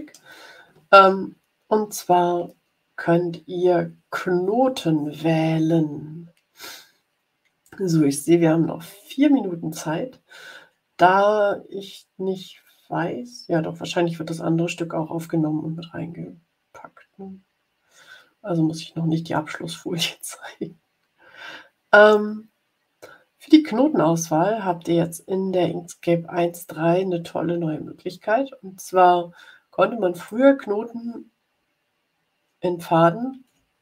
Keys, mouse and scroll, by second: 30.1 click, 31.6-32.1 ctrl+scroll up 2, 32.6-33.0 ctrl+scroll up 1.